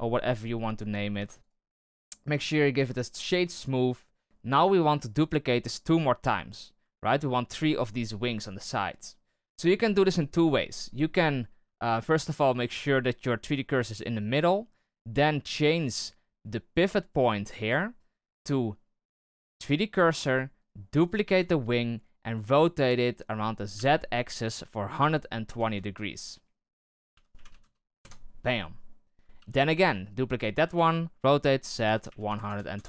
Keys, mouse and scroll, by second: 0.5-1.1 scroll up 4, 1.1 w, 2.6-3.0 scroll down 2, 3.0-4.2 shift+middle drag, 6.5-6.9 scroll down 2, 6.9-10.0 shift+middle drag, 15.9 click, 17.4-20.5 drag, 20.5 right click, 20.9 right click, 21.2 shift+d, 22.3 r, 26.9 r, 29.3 shift+d, 30.6 r.